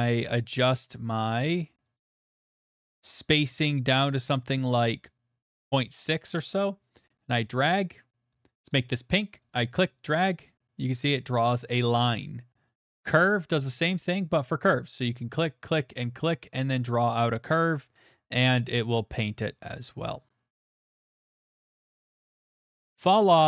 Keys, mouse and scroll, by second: 1.1 middle click, 1.2 middle click, 1.3 middle click, 1.4 middle click, 2.1 click, 5.5 click, 6.0 middle click, 6.5 middle click, 7.4 click, 8.7 click, 10.1 click, 12.1 click, 12.8 click, 14.2 click, 14.7 click, 15.9 click, 16.7 click, 21.8 click, 22.6 click, 23.1-23.4 scroll.